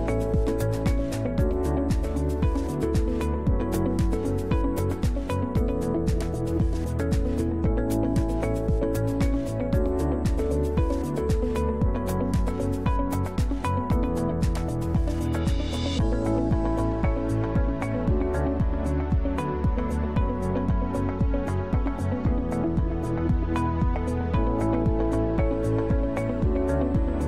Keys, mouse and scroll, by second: 0.0-2.9 drag, 5.9 click, 8.2 click, 9.2 right click, 10.2 right click, 11.6 click, 13.7 click, 15.1 click, 16.8 click, 20.7 Delete, 24.1 click, 24.3 click.